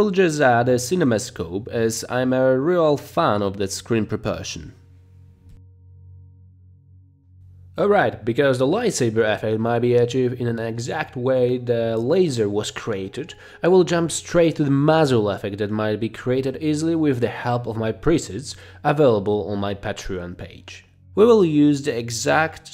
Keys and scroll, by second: 20.0 t.